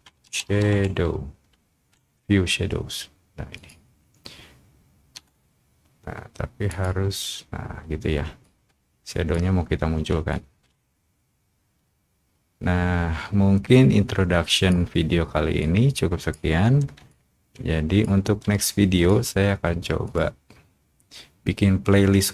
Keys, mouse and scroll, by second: 0.7 a, 1.0 a, 3.5 click, 6.6 click, 8.4 click, 10.3-14.6 shift+drag, 14.9 middle click, 15.5 click, 17.0 shift+click, 18.6 shift+click, 20.0 click.